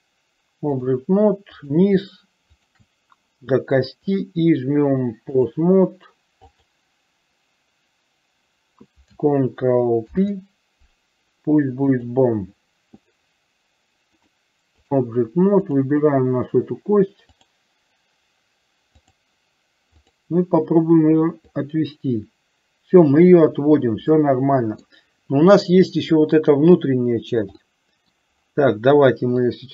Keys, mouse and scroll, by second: 0.0-1.0 drag, 2.6 shift+click, 4.3-5.6 drag, 6.6 click, 10.3 ctrl+p, 14.2 click, 15.7 click, 17.5-19.4 drag, 20.0 click, 21.8-23.4 drag, 24.3 middle click, 27.9 middle click, 29.6-29.7 drag.